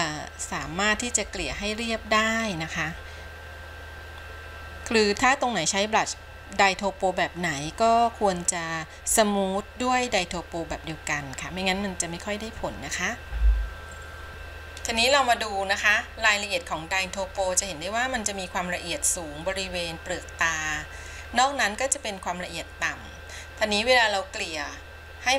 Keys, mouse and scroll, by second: 14.3-17.5 middle drag, 17.6-18.0 scroll up 3, 21.3-21.7 scroll down 2.